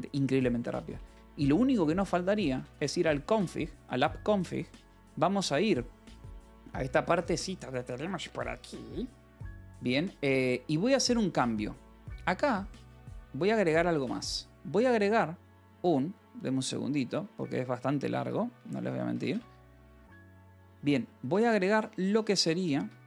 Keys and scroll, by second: 0.8 space, 1.9-4.1 typing, 7.2 ctrl+e, 7.5 Escape, 8.2 Escape, 12.4-13.4 typing, 16.9-19.6 typing, 18.1 Escape, 20.6 alt+Tab, 20.9 j, 21.2 BackSpace.